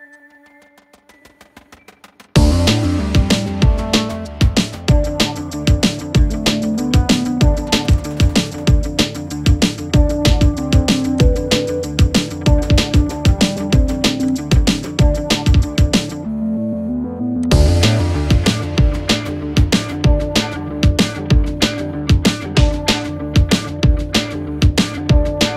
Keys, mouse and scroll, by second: 0.1 click, 1.0 ctrl+-, 1.3 ctrl+0, 1.7-2.1 typing, 2.2-5.1 drag, 7.6-8.4 typing, 7.9 click, 11.1 click, 13.1-15.2 typing, 14.3-17.4 drag, 20.6 ctrl+=.